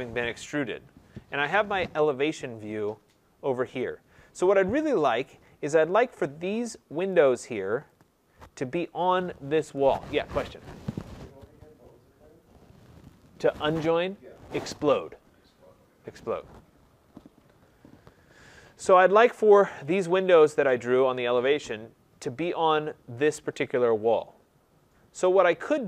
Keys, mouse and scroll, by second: 1.2 middle click, 2.2 click, 3.7 click, 5.2 right click, 7.0 click, 7.9 click, 19.8 click, 20.6 click, 25.0-25.7 scroll.